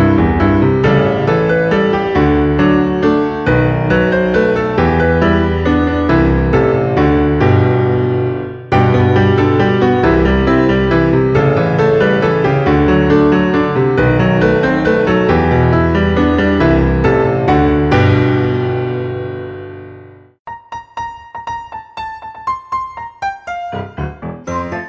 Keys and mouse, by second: 0.1 e, 1.1 click, 1.4 e, 2.2 click, 2.4 e, 3.3 click, 3.5 e, 4.5 click, 4.9 e, 6.0 click, 6.1 e, 6.9 click, 7.0 e, 9.4 click, 10.5 click, 12.1 click, 13.4 click, 15.3 click, 18.5 click, 19.7 e, 21.2 click, 22.1 Tab, 23.0 middle click, 23.6 g, 23.7 x.